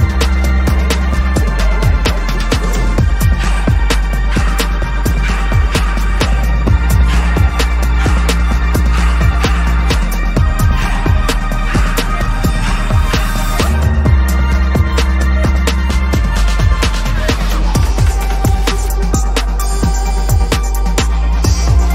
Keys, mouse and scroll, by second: 1.7 ctrl+=, 1.8 ctrl+=, 2.1 ctrl+=, 5.4 ctrl+-, 5.6 ctrl+-, 5.8 ctrl+-, 5.9 ctrl+-, 6.1 ctrl+-, 6.4 ctrl+-, 7.1 double click, 14.4 ctrl+=, 14.6 ctrl+=, 14.7 ctrl+=, 15.0 ctrl+=, 15.3 space, 16.2 ctrl+=, 16.6 space, 17.3 ctrl+=, 18.2 [, 20.4 typing.